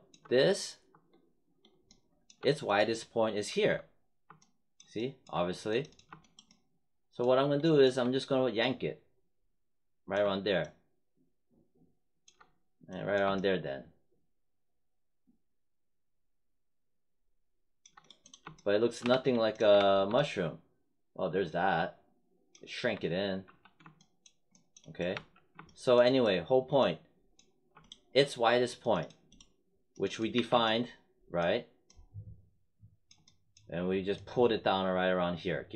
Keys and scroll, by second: 19.0 3, 22.7 1, 23.4 3, 25.1 1, 30.3 w.